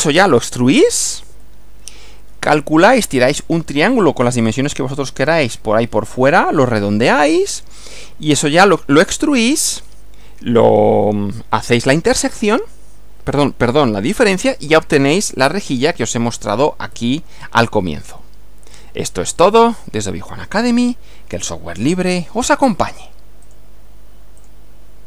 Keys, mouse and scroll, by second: 1.3 Right, 8.1 Right, 9.3 Left, 15.3 Left, 23.5 click, 24.4 click.